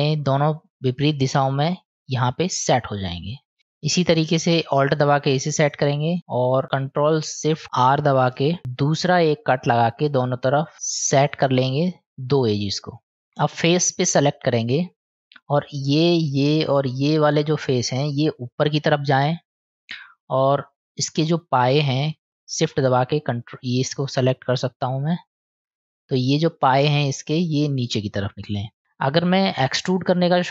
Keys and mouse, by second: 2.9 middle click, 5.6 alt+click, 8.2 ctrl+shift+r, 14.2 click, 15.6 click, 16.2 shift+click, 16.7 shift+click, 17.4 shift+click, 18.1 middle click, 19.6 middle click, 24.0 shift+click, 27.3-29.3 drag.